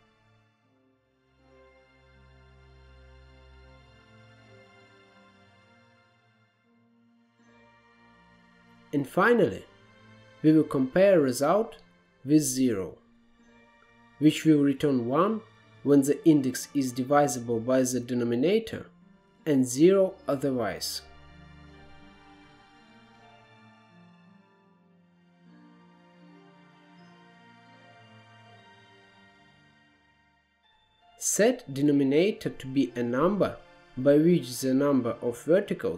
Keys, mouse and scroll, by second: 0.1-1.1 drag, 2.1-2.7 middle drag, 3.2-4.7 drag, 5.1-6.5 drag, 6.9-7.4 scroll down 6, 7.7 drag, 8.0-8.8 scroll up 3, 8.8 shift+a, 13.3-14.1 scroll up 2, 14.1-16.4 drag, 16.4 middle click, 17.2-18.2 scroll up 1, 18.2-23.4 drag, 23.6-24.8 drag, 24.8-25.8 middle drag, 25.8 click, 27.3 scroll down 5, 27.4-28.1 middle drag, 28.1 scroll up 1, 28.3 middle click, 28.6 click, 29.3 middle click, 29.5 scroll up 1, 29.8-30.3 drag, 30.3 scroll down 1, 30.6 middle click, 30.6-31.4 scroll up 7, 31.4-32.5 middle drag, 32.5-35.9 drag.